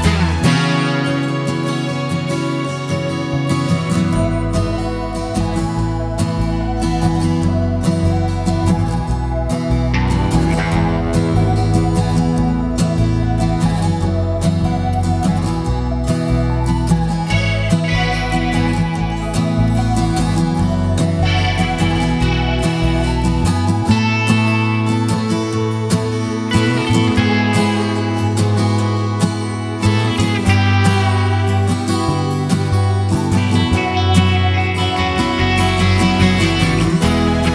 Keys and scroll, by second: 16.3 5, 26.2 super+j, 34.0 super+0.